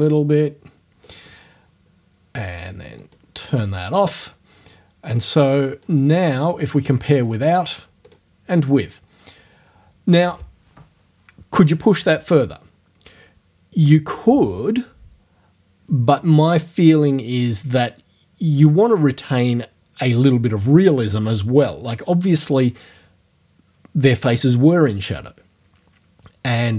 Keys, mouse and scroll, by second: 1.1 click, 3.0 click, 5.2 click, 7.3 click, 8.1 click.